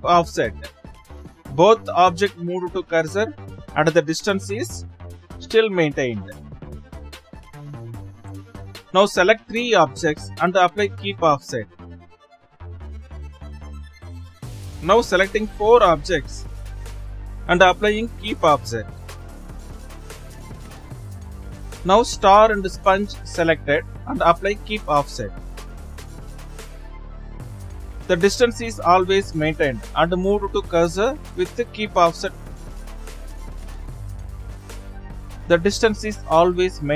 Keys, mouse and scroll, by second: 0.3 shift+s, 2.2 shift+s, 6.8 ctrl+z, 6.9 shift+s, 7.5 ctrl+z, 8.4 shift+click, 11.9 shift+s, 13.5 ctrl+z, 14.4 shift+click, 16.8 shift+s, 17.6 scroll down 3, 18.7 ctrl+z, 20.7 click, 21.3 click, 22.1 shift+click, 25.2 shift+s, 26.9 shift+s, 29.2 ctrl+z, 32.1 Left.